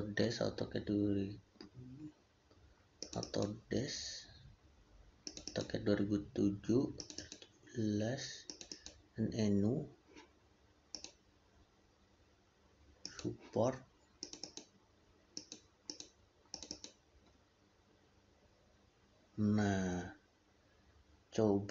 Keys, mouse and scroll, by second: 6.8 click.